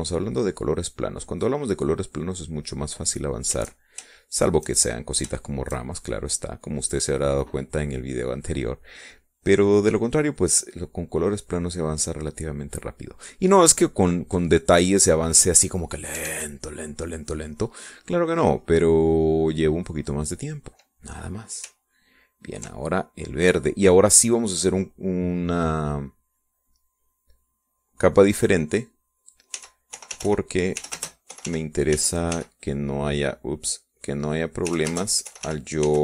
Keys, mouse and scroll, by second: 5.6 shift+click, 6.9 shift+click, 7.6-9.9 shift+drag, 10.5-14.0 drag, 14.1 middle click, 15.8-16.9 middle drag, 17.8 ctrl+s, 18.7 middle click, 19.5-22.3 drag, 23.6 ctrl+click, 24.6 ctrl+middle click, 25.7 click, 26.5 click, 27.0 click, 27.9 click, 29.1 click, 30.8-34.3 typing, 34.6 click, 35.1 click, 35.5 click.